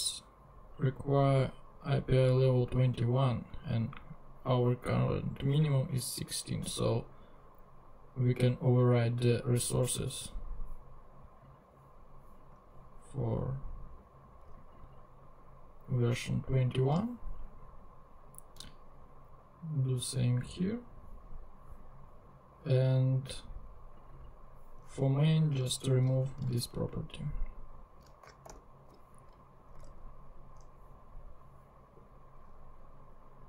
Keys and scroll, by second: 25.6 super+x, 28.4 alt+super+l, 29.8 alt+super+Tab.